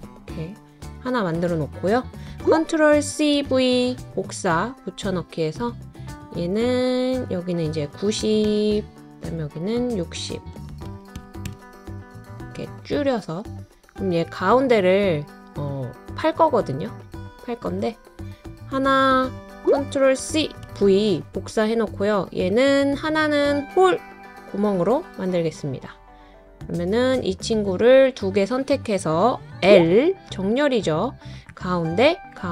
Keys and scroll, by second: 2.9 super+c, 3.3 super+v, 8.0-8.9 typing, 10.9 typing, 11.4 Return, 13.1 typing, 20.2 super+c, 20.6 super+v.